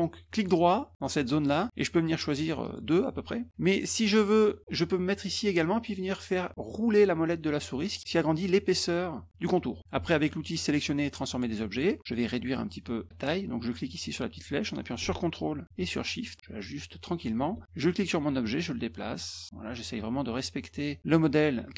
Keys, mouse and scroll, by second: 0.4 right click, 2.6 click, 6.0-6.8 scroll up 4, 7.6 scroll up 1, 11.3 click, 13.7-17.2 drag, 17.9-21.0 drag.